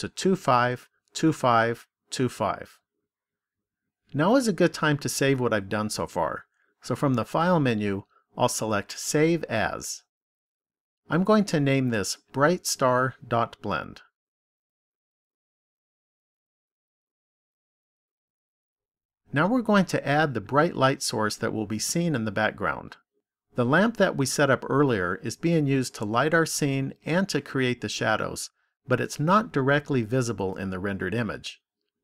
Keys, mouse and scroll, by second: 8.5 click, 19.1 click.